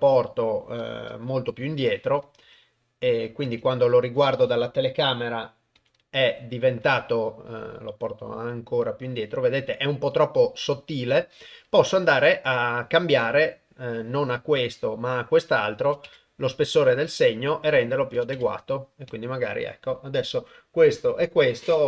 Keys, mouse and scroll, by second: 0.4-3.5 middle drag, 1.4 g, 2.4 KP_0, 3.5 KP_0, 5.8 g, 15.8 click, 17.8 click.